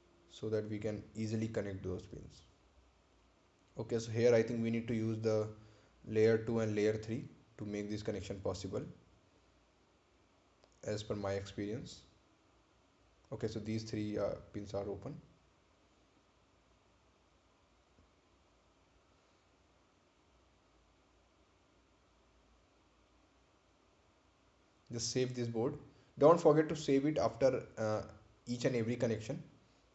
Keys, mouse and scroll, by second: 0.2 ctrl+click, 12.0-12.5 scroll up 1, 12.5 scroll, 12.5-13.4 scroll down 1, 13.4 scroll up 1, 13.9 scroll down 1, 16.0 click, 20.5 click, 22.0-22.8 scroll up 1, 24.0 ctrl+click, 29.3 ctrl+click.